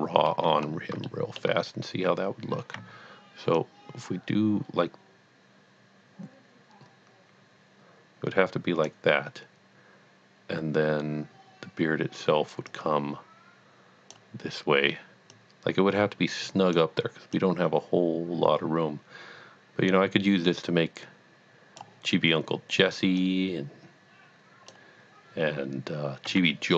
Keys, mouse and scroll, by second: 0.6-1.1 scroll up 1, 1.1 shift+middle click, 2.8-5.0 typing, 3.6 click, 6.0 d, 8.6 d, 9.4 d, 10.5 d, 11.2 d, 13.0-19.4 typing, 15.3 click, 17.4 click, 22.4-24.2 d, 23.2 click, 24.4-25.1 d, 25.2 d, 25.5 d.